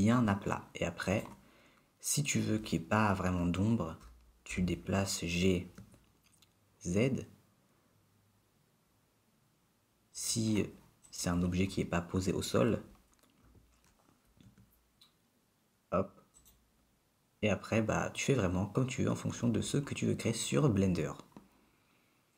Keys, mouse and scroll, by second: 1.2 click, 4.5 g, 11.3 click, 13.8 g.